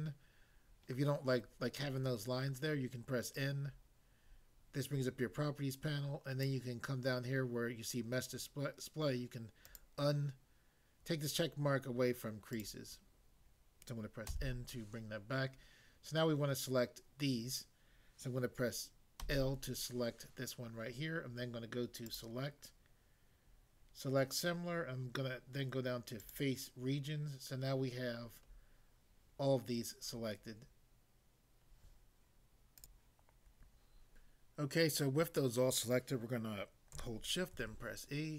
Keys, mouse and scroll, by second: 3.3 click, 6.5 click, 9.7 click, 12.5 click, 14.3 n, 19.2 l, 22.1 click, 26.2 click, 28.2 scroll down 1, 32.8 click, 32.9 click, 37.6 e.